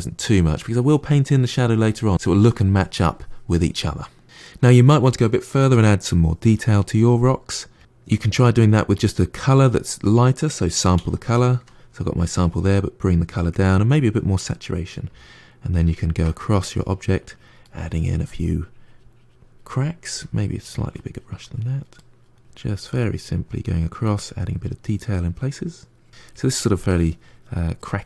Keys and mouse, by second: 3.6-5.3 middle drag, 6.9 f, 7.8 click, 10.8 s, 12.1-13.1 drag, 13.8 click, 14.3 middle click, 14.9 f, 15.8 ctrl+middle click, 16.6 click, 17.5 middle click, 17.9-20.0 drag, 20.0 f, 20.5-21.9 drag, 21.9 middle click, 22.3 click, 23.0 middle click, 23.4 click, 24.2 middle click, 24.5 click, 25.1 middle click, 25.7 click, 26.2 middle click, 26.5-27.7 drag, 27.7 middle click.